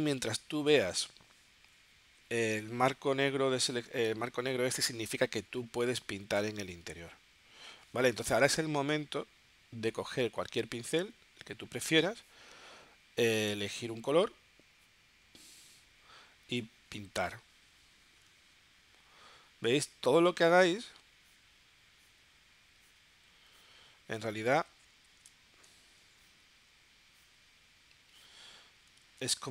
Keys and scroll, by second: 29.0 super+z.